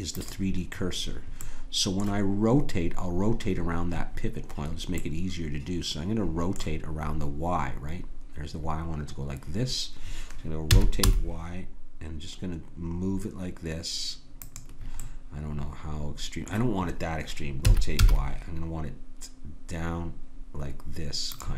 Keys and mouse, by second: 0.8 middle click, 1.4-3.6 drag, 5.0-6.9 middle drag, 10.7 r, 15.0-17.6 middle drag, 17.6 r.